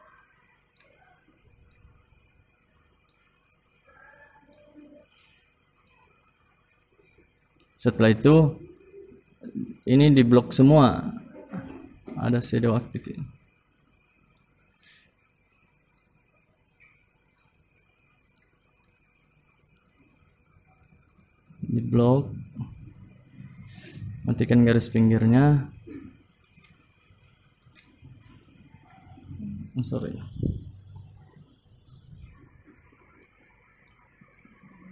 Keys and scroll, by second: 22.8 ctrl+z.